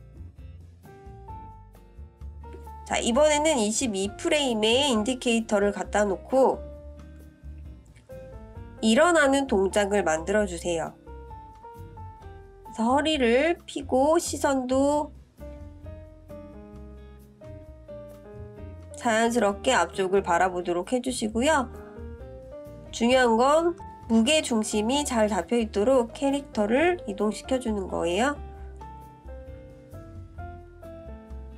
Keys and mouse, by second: 7.5-10.3 drag, 11.9-19.2 drag, 20.6 click, 22.0-23.5 drag, 24.4 click, 25.5-26.8 drag, 27.8 click, 29.2-30.5 drag.